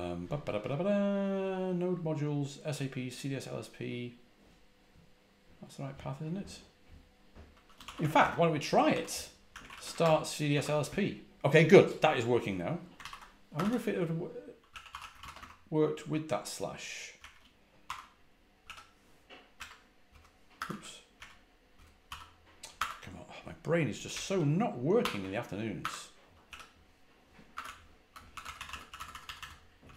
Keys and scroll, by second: 7.5-10.4 typing, 14.3-15.5 typing, 17.1-17.7 typing, 19.2-22.7 typing, 24.0-24.9 typing, 25.7 Escape, 26.3 typing, 27.4-29.9 typing.